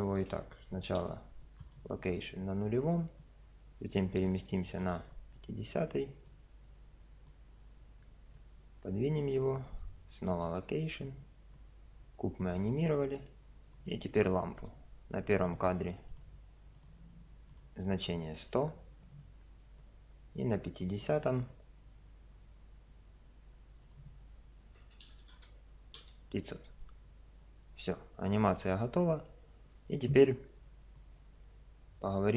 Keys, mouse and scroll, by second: 1.0 i, 3.2-5.0 drag, 5.1-6.2 middle drag, 6.2-8.1 drag, 8.4-10.2 drag, 9.7 i, 11.6-13.3 drag, 14.5 click, 15.2-16.2 right drag, 15.4-18.4 drag, 18.4 middle click, 18.5 i, 19.8-21.4 drag, 23.8-25.1 drag, 25.1 KP_0, 26.0 i, 31.0-32.3 drag.